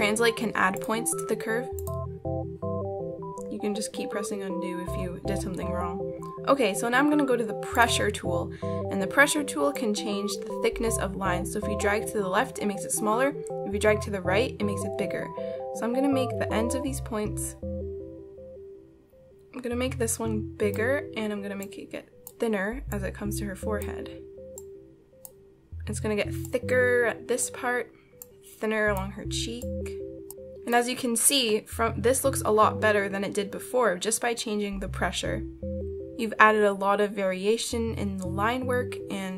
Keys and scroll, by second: 3.0 ctrl+z.